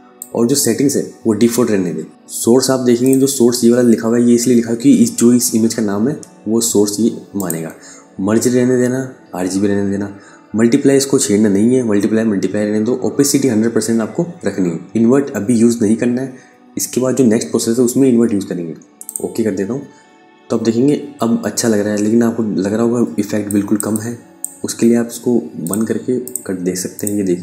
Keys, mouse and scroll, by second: 4.2 click, 6.8 click, 18.5 click, 22.7 ctrl+Num_Lock, 22.9 ctrl+click, 23.4 space, 25.1 click.